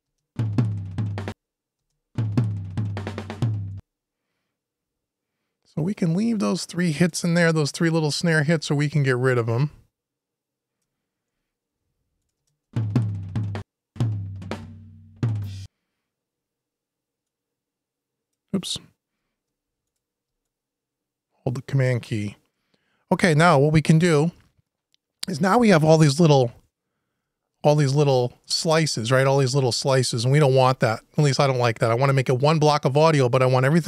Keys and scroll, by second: 11.1 super+Delete, 11.7 Delete, 22.3 super+Delete.